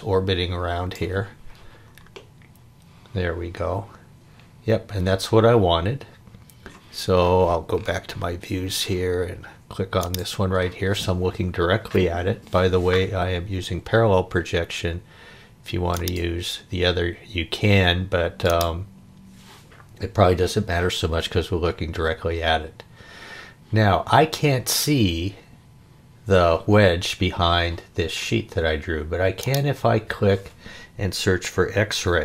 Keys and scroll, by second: 31.7 x, 32.0 -.